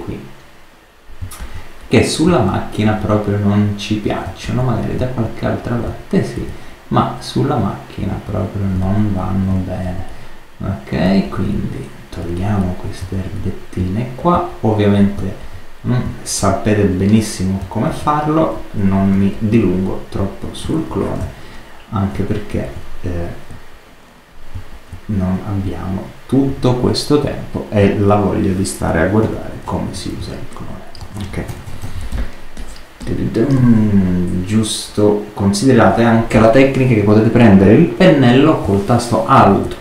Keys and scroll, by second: 20.8 alt+super+z, 29.1 super+-, 30.1 super+space, 31.0 super+space, 31.4 super++, 32.0 super+space.